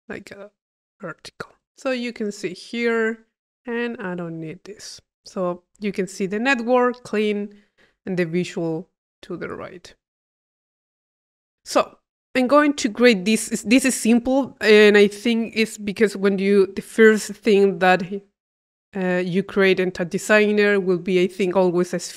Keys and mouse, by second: 0.6 click, 1.2 click, 1.7 i, 2.8 click, 3.6 click, 4.0 click, 4.5 middle click, 5.0 click, 5.7 middle click, 6.3 p, 7.6 click, 9.4 click, 12.2 click.